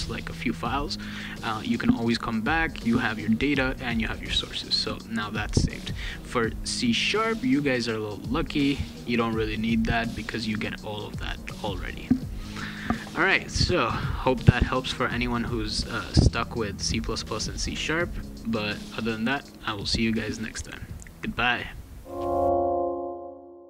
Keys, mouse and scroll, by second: 3.0 click, 4.5 click, 5.6 click, 8.6 click, 13.8 click, 17.4 click, 18.6 click.